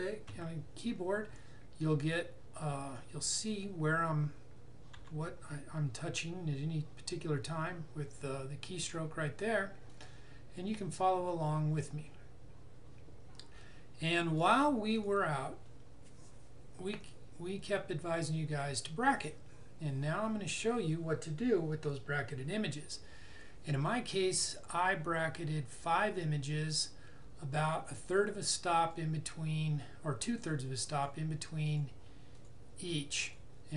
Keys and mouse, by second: 0.4 Escape, 5.0 w, 9.9 click, 28.1 click.